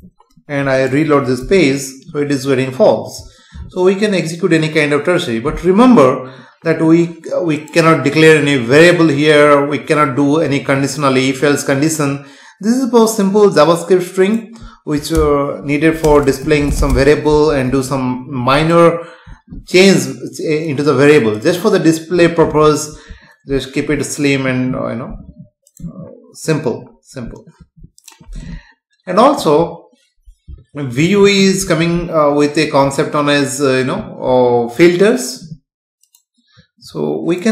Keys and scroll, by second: 1.4 F5, 15.1 BackSpace, 16.1 space, 17.7 ctrl+s.